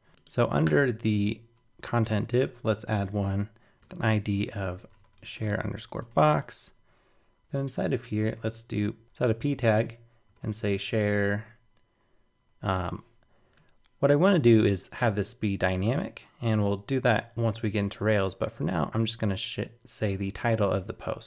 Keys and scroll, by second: 20.2 super+c.